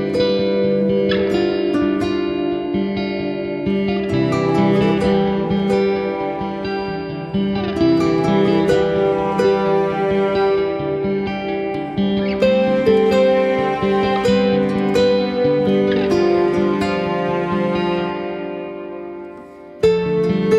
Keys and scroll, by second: 7.5 ], 7.8 ], 8.0 ], 11.1 z, 16.1 ].